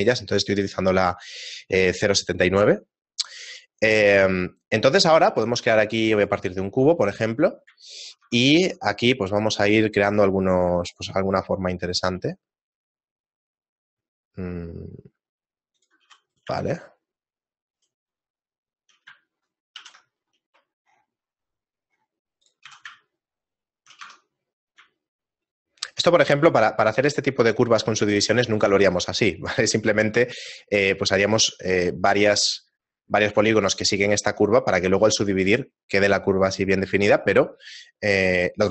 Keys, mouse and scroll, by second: 5.2 shift+a, 7.0 right click, 7.9 shift+middle click, 8.2 Tab, 8.8 ctrl+Tab, 9.6 right click, 9.9 shift+middle click, 10.5 middle click, 12.1 ctrl+b, 16.3 right click, 16.8 shift+middle click, 17.8 shift+right click, 18.1 shift+middle click, 19.8 ctrl+b, 22.7 a, 23.1 shift+middle click, 24.6 Tab, 24.6 middle click, 24.6-25.7 scroll down 1, 25.7 shift+middle click, 35.7 shift+middle click, 37.5 shift+middle click.